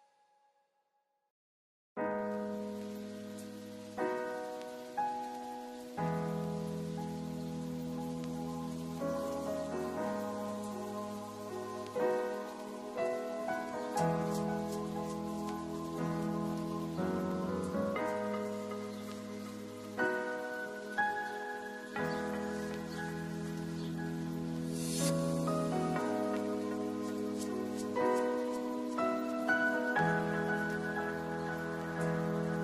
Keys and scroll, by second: 2.4 ctrl+d.